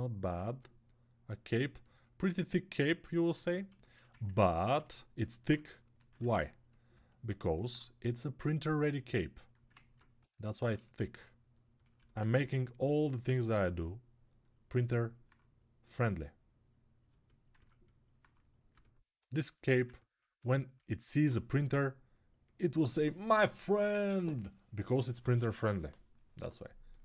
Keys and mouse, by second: 4.5 Tab, 5.9 ctrl+r, 6.5-8.0 alt+middle drag, 8.0-17.3 drag, 9.7 ctrl+Tab, 12.1 g.